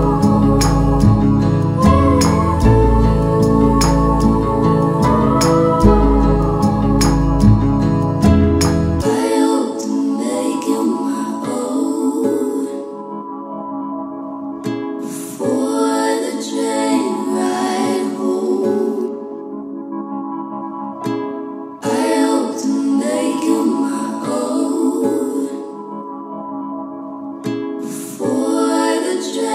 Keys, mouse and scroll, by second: 22.3 u, 23.1 click, 23.3 u, 24.3 click, 24.6 u, 25.6-26.5 scroll down 1, 27.0-27.7 drag.